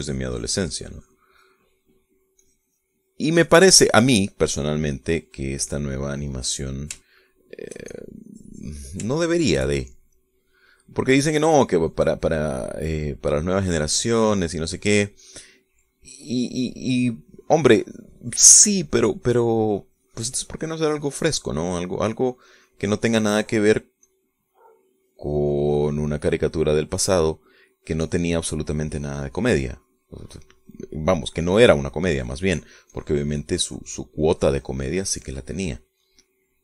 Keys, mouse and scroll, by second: 2.8 middle click, 6.6 click, 6.8 middle click, 7.8 middle click, 8.5 shift+middle click, 9.2-10.3 shift+drag, 10.5-12.2 shift+middle drag, 12.5-14.3 middle drag, 15.2-16.3 middle drag, 16.6-22.8 drag, 22.8-25.4 middle drag, 25.4-27.7 drag, 27.8 click, 28.4 middle click, 28.8 click, 29.3 middle click, 29.4-36.6 drag.